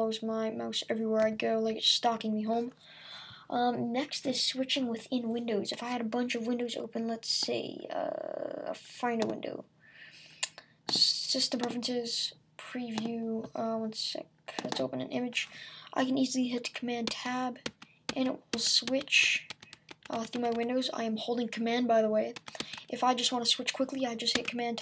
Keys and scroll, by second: 17.1 super+Tab.